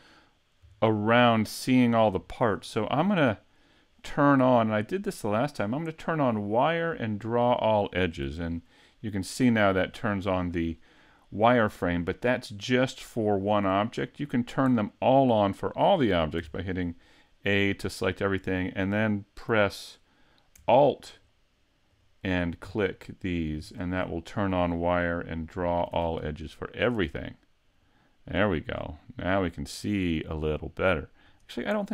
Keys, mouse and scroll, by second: 0.8 shift+middle click, 2.3 shift+middle click, 3.2-3.9 scroll down 1, 3.9 scroll down 2, 4.3 right click, 4.7 middle click, 6.5 click, 7.3 click, 8.2 a, 8.5 middle click, 10.1-10.4 scroll down 1, 10.8 middle click, 13.6 middle click, 14.2-14.7 scroll down 1, 14.7 middle click, 16.4 a, 16.9 middle click, 17.9 middle click, 21.1 alt+click, 21.9 alt+click, 22.8 alt+click, 23.6 alt+click, 25.9 a, 26.4 middle click, 28.7 scroll up 4, 29.2 middle click, 30.5 scroll up 2, 31.3 right click.